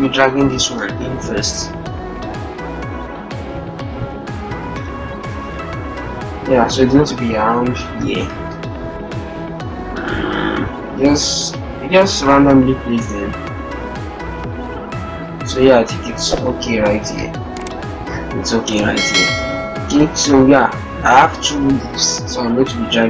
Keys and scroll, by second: 19.9 alt+Tab.